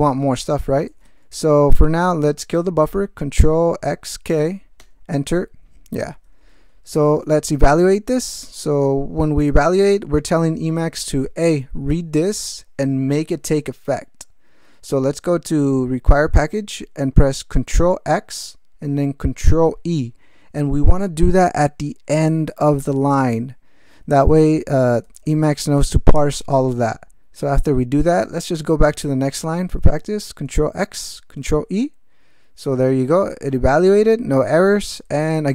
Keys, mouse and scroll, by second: 0.9 ctrl+x, 1.1 ctrl+k, 4.8 Return, 6.5 ctrl+p, 17.8 ctrl+x, 19.6 ctrl+e, 25.0 ctrl+n, 25.2 ctrl+e, 30.5 ctrl+x, 31.4 ctrl+e, 35.1 ctrl+n.